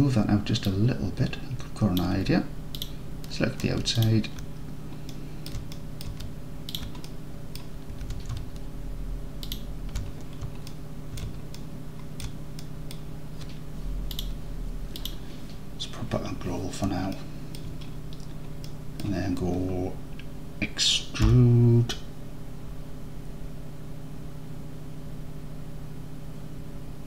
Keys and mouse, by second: 0.8-2.0 drag, 5.2-5.5 alt+drag, 5.8 drag, 6.0 click, 6.8 alt+shift+drag, 7.1-7.6 alt+drag, 10.7 alt+middle click, 11.2 middle drag, 11.6-11.9 alt+middle drag, 12.1 alt+middle click, 12.6 middle drag, 14.2-15.6 drag, 17.2-17.6 alt+middle drag, 18.7 middle click, 21.4 e.